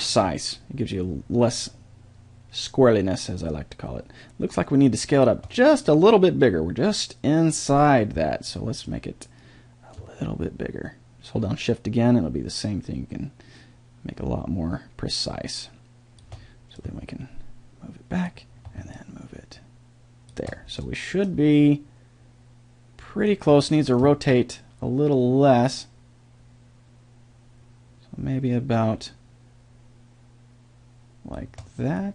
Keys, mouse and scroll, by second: 8.8-15.0 drag, 16.8-18.7 drag, 18.9-21.5 drag, 21.5-23.4 middle drag, 24.3-26.2 drag, 32.0-32.1 middle drag.